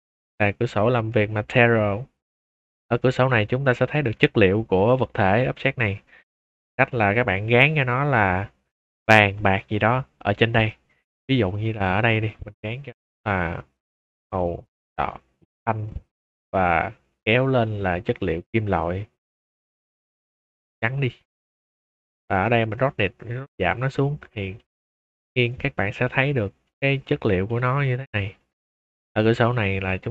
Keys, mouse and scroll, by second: 1.4 click, 2.1-2.5 scroll up 1, 2.9-3.3 middle drag, 3.5 shift+middle drag, 3.8 middle click, 4.2 click, 4.8 shift+middle drag, 5.2 scroll up 2, 5.5-6.5 middle drag, 6.7 shift+middle drag, 7.0-7.6 scroll up 2, 7.8 middle click, 9.5 click, 11.4 click, 12.2 click, 13.0 middle click, 13.9 click, 14.3 click, 15.0-15.5 drag, 15.8 click, 17.0-18.3 drag, 19.5 click, 20.8-21.2 drag, 21.5 click, 22.4-23.4 drag, 24.3 shift+middle drag, 25.2 click, 25.9 middle click, 26.3 middle drag, 26.7 click, 27.1 middle click, 27.4 click, 28.5-29.1 middle drag, 29.4 z.